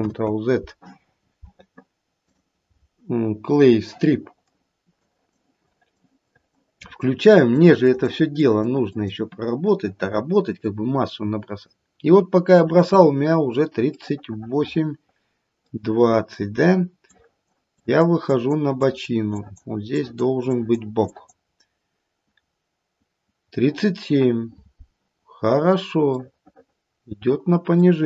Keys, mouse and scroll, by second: 0.1 ctrl+z, 2.3 click, 5.1 click, 5.7 click, 6.6 click, 6.8 click, 7.3 click, 7.8 click, 8.3 click, 8.9 click, 14.3 middle click, 14.6 middle click, 15.5 middle click, 17.0 click, 17.8 click, 18.3 click, 18.8 click, 19.3 click, 19.9 click, 20.4 click, 21.1 click, 26.3 middle click.